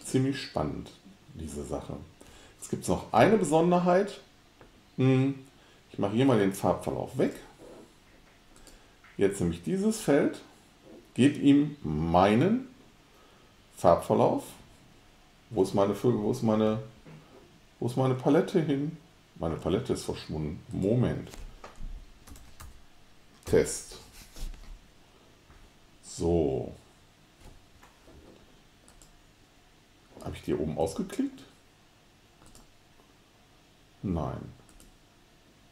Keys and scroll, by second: 22.1-23.6 typing.